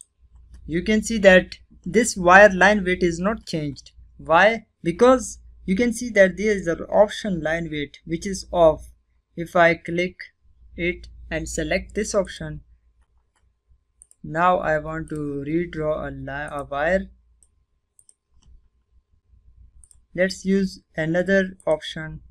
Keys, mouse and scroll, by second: 11.0 click, 17.2 right click, 17.4 click, 17.7-18.6 scroll down 1, 18.6 click.